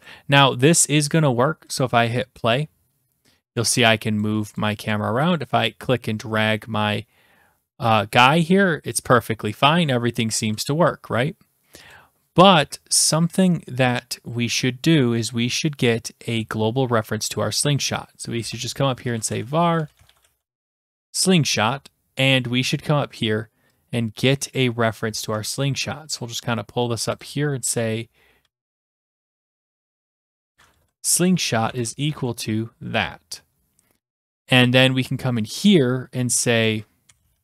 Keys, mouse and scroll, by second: 0.1 click, 1.8 click, 3.6 click, 4.2 click, 4.6 click, 4.9 click, 8.9 click, 11.9 click, 16.4-17.7 scroll, 17.7 click, 18.4 Return, 18.8-21.5 typing, 22.3-23.0 scroll down 7, 25.2 click, 25.4 ctrl+c, 25.9-26.6 scroll down 7, 27.2 click, 27.2 scroll, 27.7 Return, 28.2-29.9 typing, 30.8 Return, 31.0 Return, 31.7 Return, 32.1 ctrl+v, 33.1-34.1 scroll down 13, 34.1-34.7 scroll, 36.6 click, 36.8-37.4 typing.